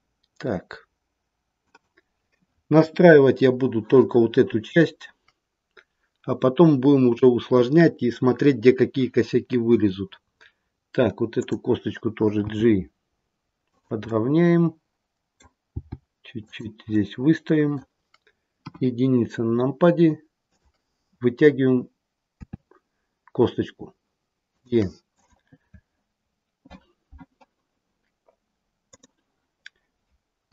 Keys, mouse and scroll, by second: 2.7 KP_1, 11.3 click, 12.3 g, 14.0 middle click, 15.7 g, 16.9 middle click, 18.6 KP_1, 20.4 click, 22.4 e, 25.0 click.